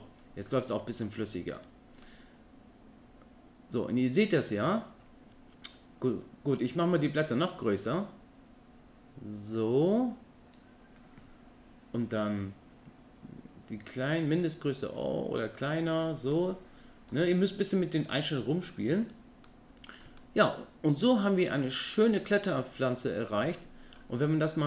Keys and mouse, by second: 2.0-4.8 middle drag, 6.8-10.7 drag, 12.1-17.1 drag, 19.5-19.9 middle drag, 20.2-24.0 middle drag.